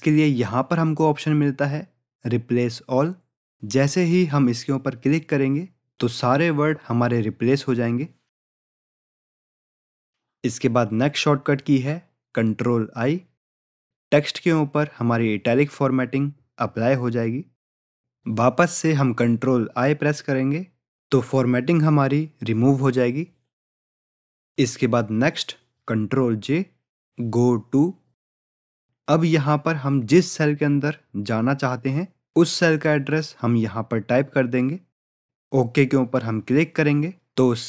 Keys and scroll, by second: 15.8 ctrl+i, 19.8 ctrl+i, 28.5 ctrl+j.